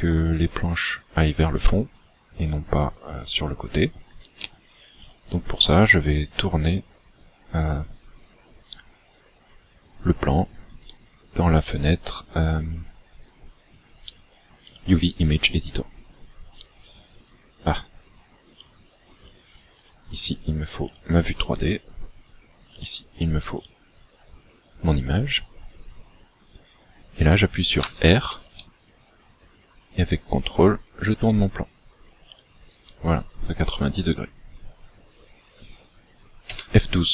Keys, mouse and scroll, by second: 20.9 click, 22.8 click, 24.6 scroll down 1, 27.9 r, 32.4 ctrl+click.